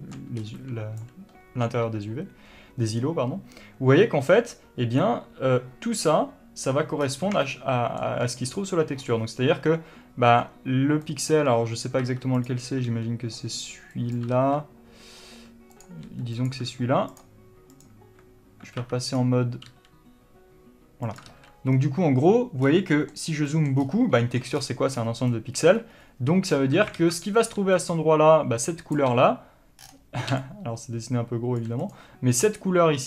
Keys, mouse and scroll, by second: 12.1 middle click, 12.1 scroll up 2, 12.4 1, 12.8 click, 13.2 g, 14.5 right click, 14.7 ctrl+z, 16.1 click, 16.4 g, 16.8 click, 20.0 g, 21.5 click, 21.6 ctrl+z, 27.3 alt+a, 27.3 middle click, 28.1-30.7 drag, 29.3 d, 30.7-33.0 right drag, 31.9 d.